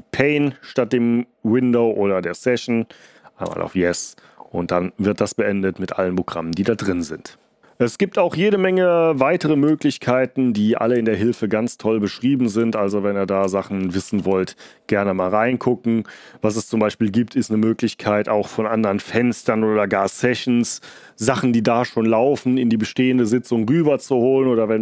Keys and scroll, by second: 3.4 y, 9.8 ctrl+d, 10.5 ctrl+c, 10.9 ctrl+d, 12.5 ctrl+d, 13.3 ctrl+c, 14.0 ctrl+l.